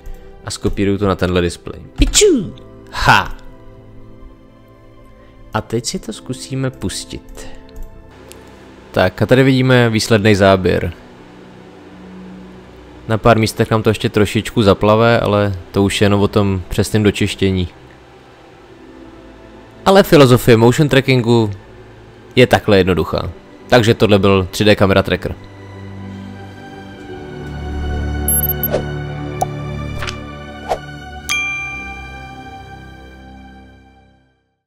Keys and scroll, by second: 1.9 ctrl+v.